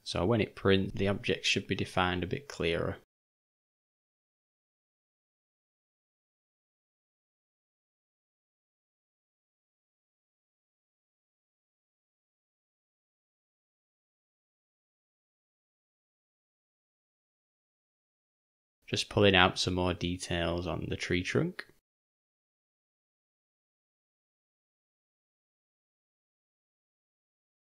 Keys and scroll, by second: 0.9-2.7 typing, 3.8 [, 4.5 ], 4.7 ], 10.5-11.5 typing, 14.7 [, 14.9 [, 23.2 [, 23.3 [.